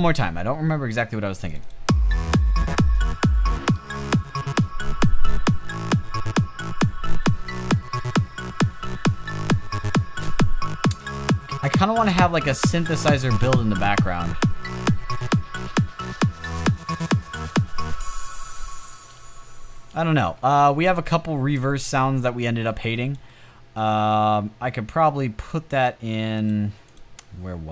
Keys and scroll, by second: 19.6 space.